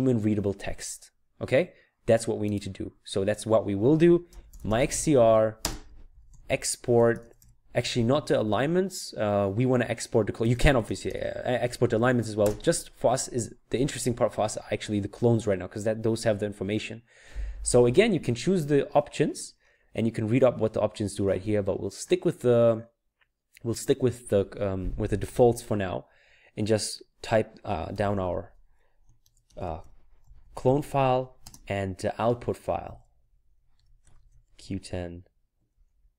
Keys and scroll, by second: 4.1-7.8 typing, 10.3-12.1 typing, 27.7-31.1 typing, 32.6-35.7 typing.